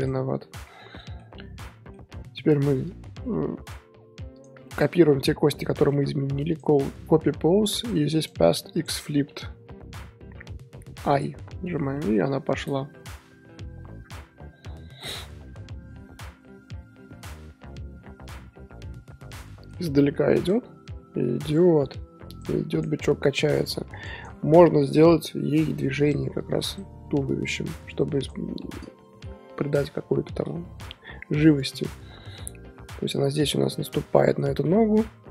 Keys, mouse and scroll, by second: 0.0 shift+click, 0.7 scroll down 1, 0.8-2.1 middle drag, 2.1 scroll down 2, 2.8 click, 4.3 shift+drag, 4.6-5.8 shift+middle drag, 5.8-7.7 right drag, 7.7 click, 8.2-9.8 right drag, 11.1-11.9 drag, 11.9 middle drag, 12.2 z, 12.7 scroll down 1, 12.7-17.9 middle drag, 18.5 scroll down 6, 18.7-19.4 middle drag, 19.4 scroll up 1, 19.4 middle click, 20.4 click, 22.3 click, 22.7 click, 23.6-26.9 drag, 24.8 KP_1, 26.9-28.2 scroll up 13, 28.2 click, 28.6-31.7 shift+middle drag, 32.3-32.9 middle drag, 32.9-33.8 scroll down 3, 34.1-35.2 middle drag, 35.2 KP_1.